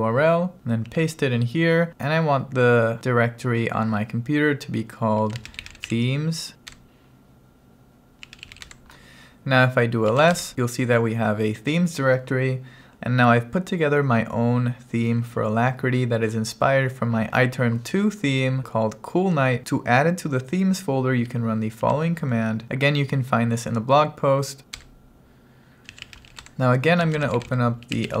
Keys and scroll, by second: 0.9 super+v, 5.0-6.4 typing, 6.8 Return, 7.8-8.8 typing, 10.1 l, 10.5 Return, 21.9 super+v, 24.9 Return, 25.7-28.2 typing.